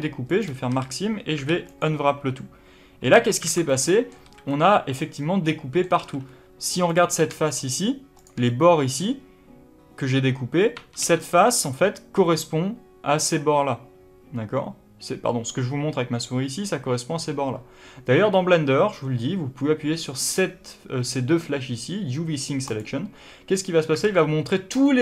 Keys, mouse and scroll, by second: 0.6 a, 3.4 alt+a, 4.1 a, 5.9 alt+a, 6.2-6.8 scroll up 2, 6.8 click, 7.4 shift+click, 8.1 shift+click, 8.4-11.2 middle drag, 10.7 2, 10.9 3, 11.2 click, 22.6 click, 23.9 alt+a, 24.7-25.0 middle drag.